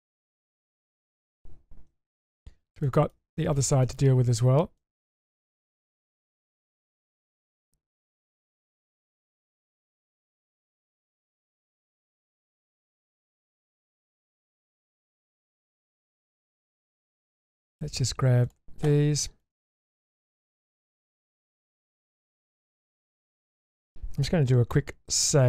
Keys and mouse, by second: 0.9 Tab, 1.9 Tab, 2.8-3.1 shift+middle drag, 3.3 middle drag, 3.8 shift+middle click, 4.3 Tab, 4.8 middle click, 6.7 click, 7.5-8.0 shift+middle drag, 10.2-11.5 drag, 13.6 middle click, 14.2 shift+middle drag, 14.8-15.4 shift+middle drag, 15.6 shift+middle drag, 16.4-17.0 middle drag, 18.4 click, 19.4 click, 20.4 click, 21.5-22.2 drag, 22.9 ctrl+click, 25.4 ctrl+shift+s.